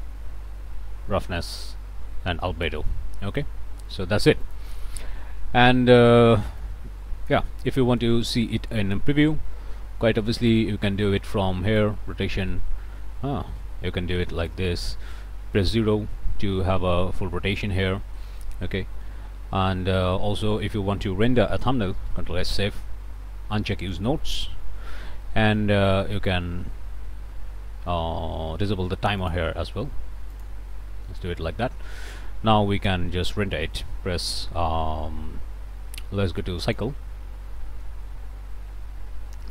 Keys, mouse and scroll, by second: 1.3 Right, 2.5 Right, 4.7-7.5 drag, 7.7 middle click, 8.5 shift+click, 8.8 shift+click, 10.5 click, 11.8-14.7 drag, 14.9 click, 15.7 0, 21.3 ctrl+click, 22.1 ctrl+s, 23.8 click, 25.3 click, 29.2 click, 30.4 click, 36.7 click.